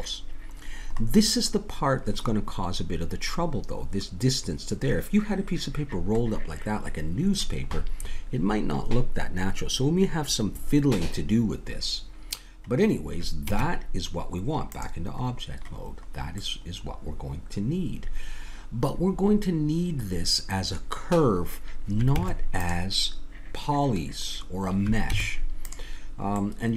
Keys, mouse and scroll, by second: 1.0-3.9 middle drag, 7.1-8.9 middle drag, 12.4-14.9 middle drag, 13.5 Tab, 16.6-18.5 middle drag, 22.2 Tab, 25.2 Tab, 26.4 middle click.